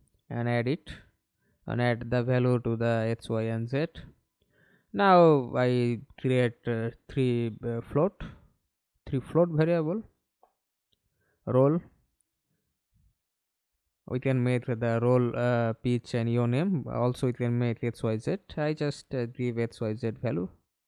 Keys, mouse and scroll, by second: 6.8 right click, 11.4 shift+r, 12.0 l, 12.1 l, 12.3 Return, 15.9 F2, 16.3 shift+x.